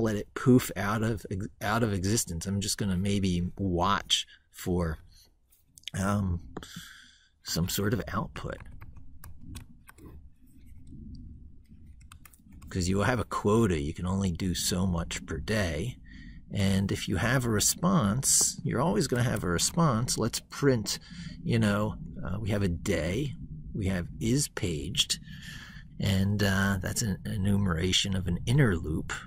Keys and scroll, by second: 7.8 ctrl+Left, 12.1 ctrl+s.